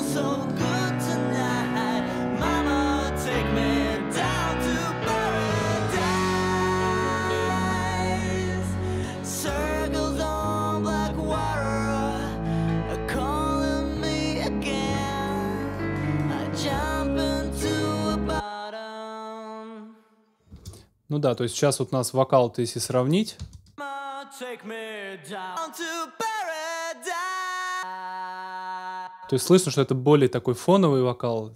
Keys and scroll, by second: 20.5 space, 23.4 space, 28.8 alt+space.